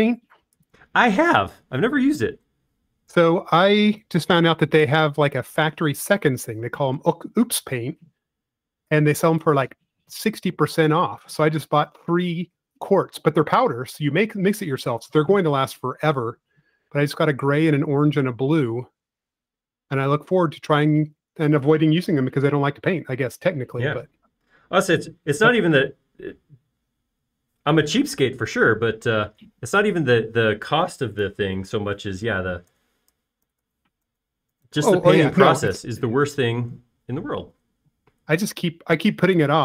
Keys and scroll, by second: 4.6 s, 34.5-36.1 typing, 36.2 Return.